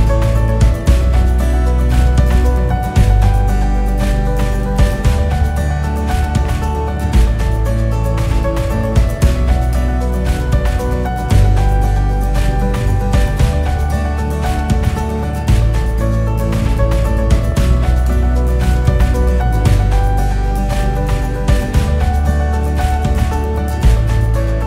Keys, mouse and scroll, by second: 3.8-7.2 drag, 7.2-8.7 scroll down 2, 9.2 click, 10.0 scroll down 4, 10.2-11.1 scroll up 7, 11.1 click, 11.7-12.3 scroll down 2, 12.3-16.4 KP_6, 16.8 KP_1, 17.8 shift+d, 19.8 r, 23.1 g.